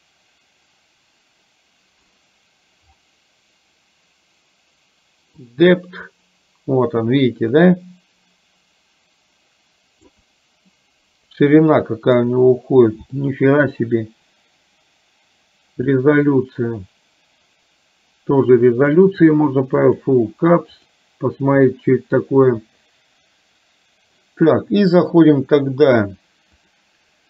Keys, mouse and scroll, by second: 5.6-10.2 drag, 10.8-12.2 middle drag, 13.2 shift+middle click, 16.5-19.0 drag, 19.9 click, 20.9 click, 26.7-27.2 drag.